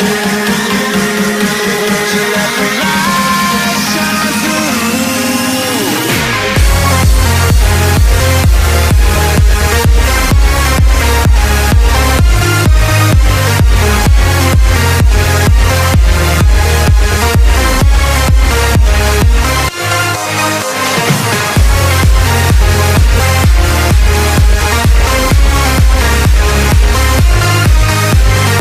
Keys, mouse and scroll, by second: 0.0 right click, 24.8 right click.